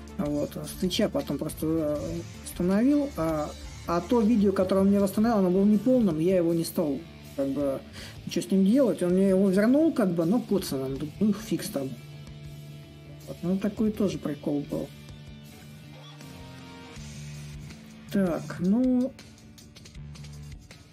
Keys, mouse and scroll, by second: 5.2-9.0 drag, 9.0 s, 10.5-15.6 drag, 15.9-20.9 drag.